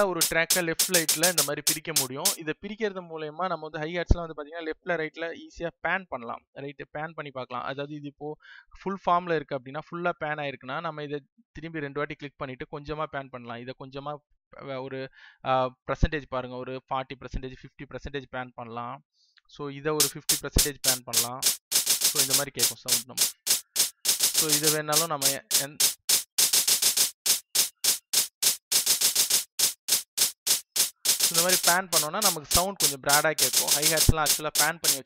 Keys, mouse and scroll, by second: 2.8 space, 9.2 click.